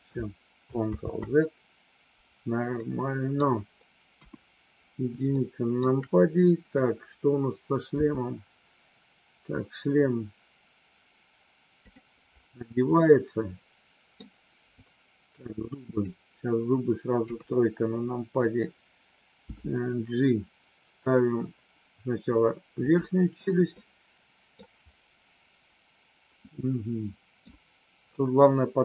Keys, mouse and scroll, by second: 1.0 ctrl+z, 2.8 middle click, 4.1 KP_1, 5.4 middle click, 6.3 click, 7.9 g, 11.8 click, 12.9-14.1 middle drag, 14.9 click, 15.9 click, 17.1 KP_3, 19.5 g, 22.9 click, 23.7 scroll up 1, 23.8 middle click, 24.5-25.7 scroll down 1, 25.7-26.5 scroll down 1, 26.5 scroll down 1, 26.7 middle click.